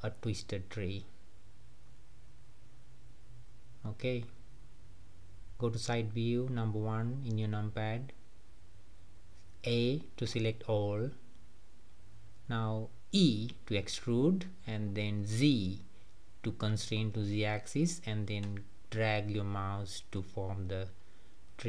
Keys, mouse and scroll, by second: 1.7 click, 2.0 g, 3.4-4.0 scroll down 3, 4.0-5.5 middle drag, 5.5 KP_1, 9.2 a, 12.4 e, 18.8 click, 19.2-20.9 middle drag, 20.9 scroll up 2, 21.1-21.6 middle drag.